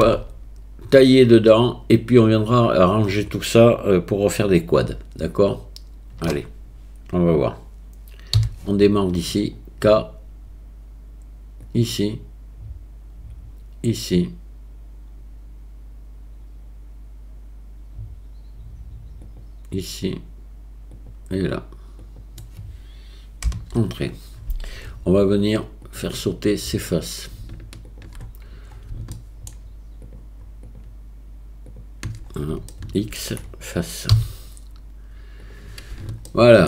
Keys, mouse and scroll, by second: 0.0 a, 8.4 k, 25.9 click, 27.0 click, 27.9 shift+click, 29.2 shift+middle click, 30.0 shift+click, 30.7 shift+click, 32.7 shift+middle click, 34.1 x, 36.3 shift+middle click.